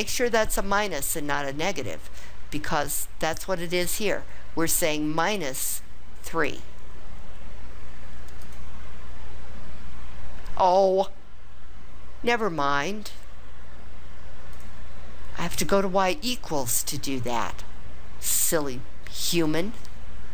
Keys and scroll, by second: 8.4 3.